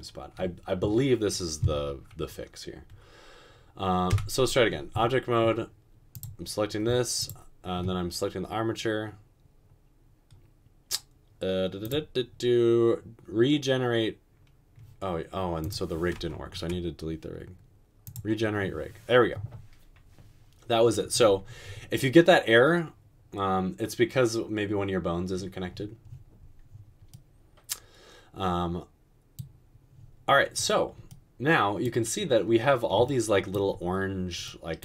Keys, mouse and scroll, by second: 4.1 Tab, 16.6 Delete.